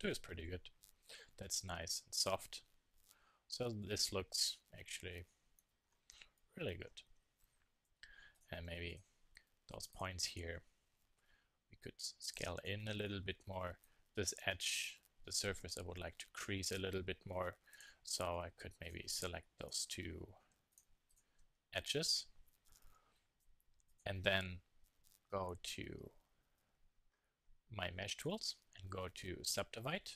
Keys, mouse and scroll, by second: 0.9-2.3 middle drag, 2.3-3.1 drag, 3.7 KP_3, 3.8 click, 9.2-10.4 middle drag, 10.4 Tab, 11.2 z, 11.7 click, 14.1 z, 15.0 s, 16.0 click, 16.6 click, 16.8 click, 19.2 z, 21.1-26.3 drag, 27.2-29.0 drag.